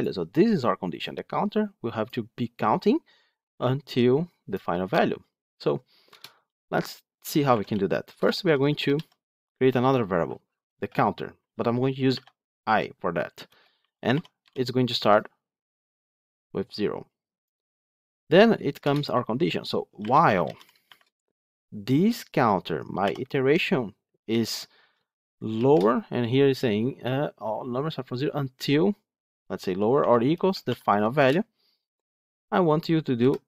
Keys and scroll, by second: 31.1 Return.